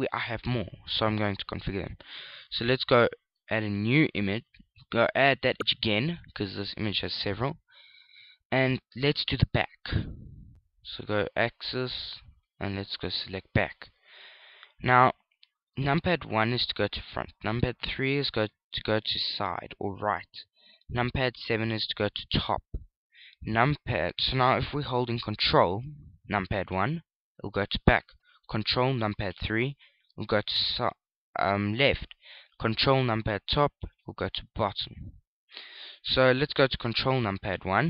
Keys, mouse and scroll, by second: 1.7 click, 4.5 click, 11.8 click, 17.1 KP_1, 18.7 KP_3, 22.6 KP_7, 27.6 ctrl+KP_1, 30.1 ctrl+KP_3, 34.0 ctrl+KP_7, 36.5 ctrl+KP_1.